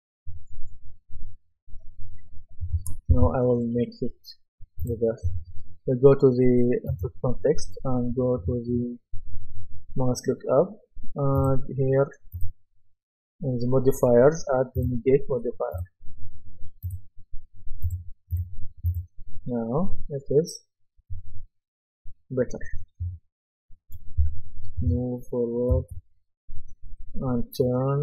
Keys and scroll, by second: 3.1 Escape, 24.2 w, 25.7 space.